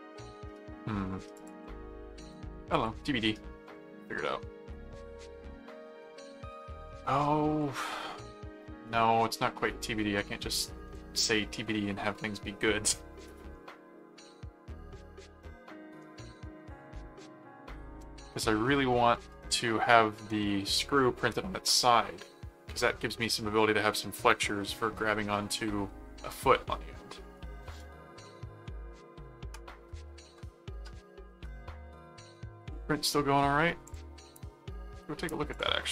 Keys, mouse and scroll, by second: 1.3 click, 2.2 ctrl+click, 2.7 ctrl+s, 8.1-10.7 middle drag, 13.3 middle click, 14.8 middle click, 16.0 middle click, 17.8 middle click, 19.1 middle click, 33.8 click, 34.3 middle click, 35.5 click.